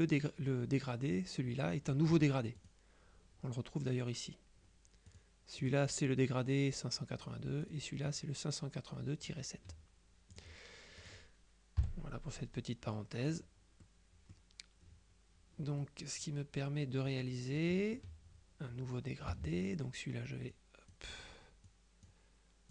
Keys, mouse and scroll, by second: 2.7 click, 5.2 click, 7.7 click, 10.4 click, 11.1 click, 11.9 Delete, 13.0 middle click, 13.5 click, 14.0 click, 15.9-17.8 drag, 19.3 g, 19.7 click, 20.6 click, 21.7 click.